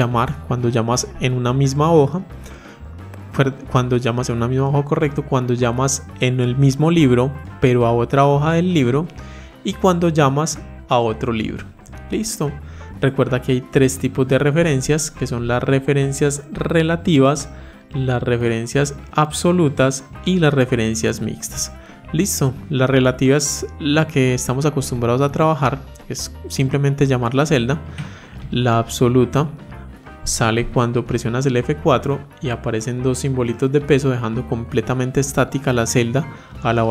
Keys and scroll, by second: 31.4 F4.